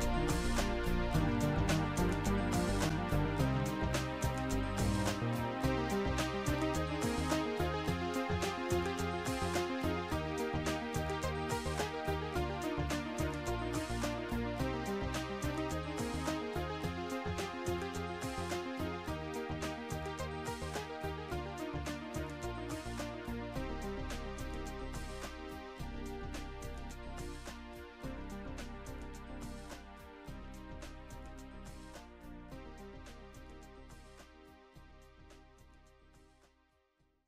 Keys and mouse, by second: 2.9 ctrl+End, 2.9 click, 4.5 ctrl+End, 6.7 right click, 7.7 click, 8.2 click, 11.0 click, 12.2 click, 12.2 right click, 14.0 click, 16.7 shift+click, 18.9 shift+click, 19.4 right click, 19.4 shift+click, 20.5 right click, 21.5 ctrl+End, 23.1 shift+click, 23.3 ctrl+End, 23.3 right click, 27.7 click, 28.7 click, 32.2 click.